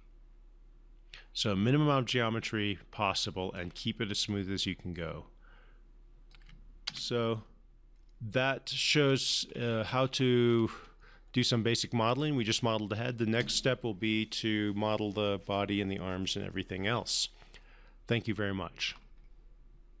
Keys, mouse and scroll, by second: 4.8-6.8 alt+drag, 7.2 space, 9.4 scroll down 1, 9.8-11.1 scroll up 1, 11.6 scroll down 1.